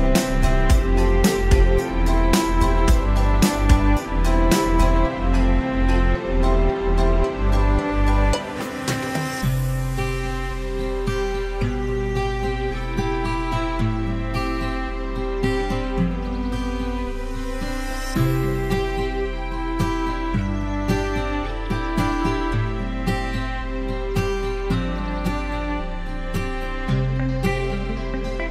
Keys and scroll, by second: 0.4 ctrl+z, 2.4 ctrl+shift+j.